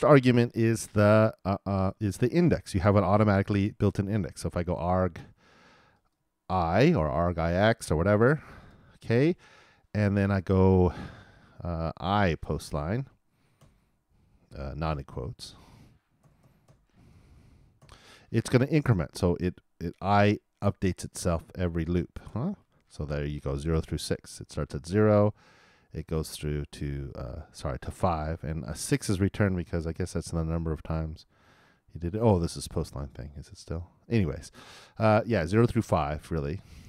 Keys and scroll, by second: 22.3 super+Return.